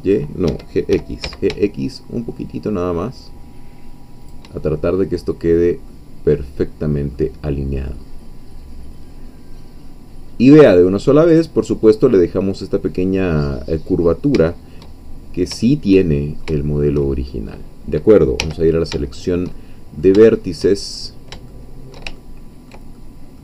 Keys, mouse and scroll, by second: 0.5 Escape, 0.9 g, 1.2 x, 4.2 shift+click, 4.6-5.4 shift+scroll down 1, 5.9-7.3 drag, 7.3-7.8 scroll down 1, 7.9-10.7 middle drag, 10.7-12.2 scroll up 1, 12.2-14.0 scroll up 1, 14.0 scroll down 1, 14.5 shift+middle click, 15.2 shift+scroll up 1, 15.7-17.0 shift+middle drag, 17.3 shift+middle click, 18.4 1, 19.0 shift+middle click, 19.6-20.7 shift+middle drag, 20.9-21.3 shift+scroll up 3, 21.5-23.4 shift+middle drag.